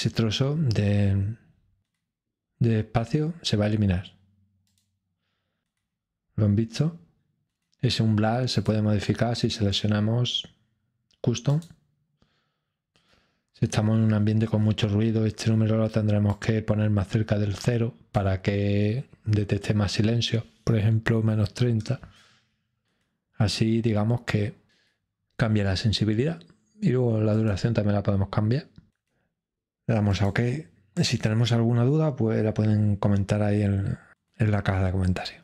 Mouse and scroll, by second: 4.6 click, 8.5 click, 11.5-12.5 drag, 16.3-17.3 drag, 27.3-28.3 drag, 30.1 click.